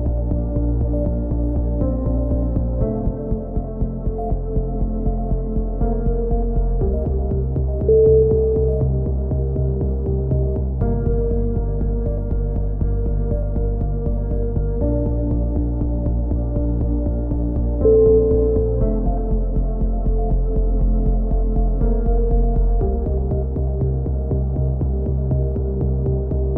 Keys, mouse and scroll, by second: 1.3 click, 2.2 middle click, 3.1 KP_3, 4.2 z, 4.8 click, 5.8 middle click, 8.4-9.5 middle drag, 14.4-15.7 drag, 15.7 a, 16.7 click, 17.0 Tab, 18.2-19.7 middle drag, 20.2-21.3 drag, 23.9 Tab, 24.3 z, 24.7 click, 26.3 ctrl+KP_7.